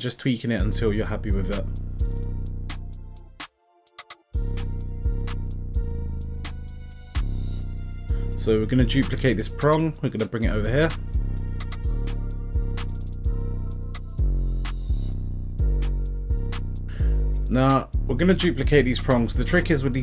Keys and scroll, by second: 19.6 z.